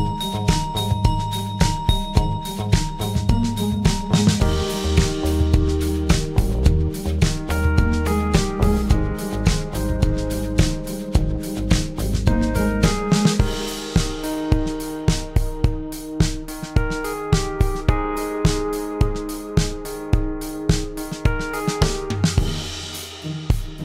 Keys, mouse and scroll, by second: 1.6 click, 2.4 click, 6.2-9.2 drag, 11.2-12.3 right drag.